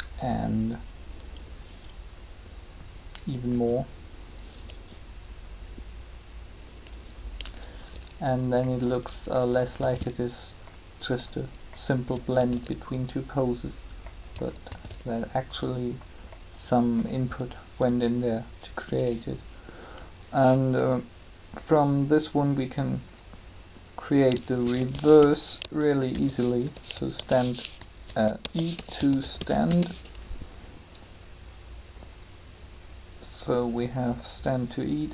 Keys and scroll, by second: 3.5 r, 9.8 alt+a, 12.3 alt+a, 14.5 alt+a, 24.4-25.0 typing, 26.1 shift+-, 26.6 2, 28.4-29.3 typing, 29.6 Return.